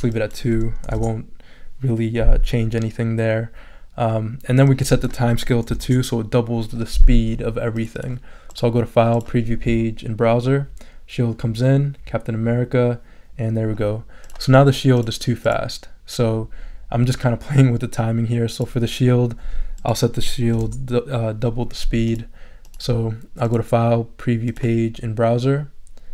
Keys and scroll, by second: 0.8 2, 0.9 Return, 5.7 2, 5.8 Return, 20.5 4, 20.6 Return.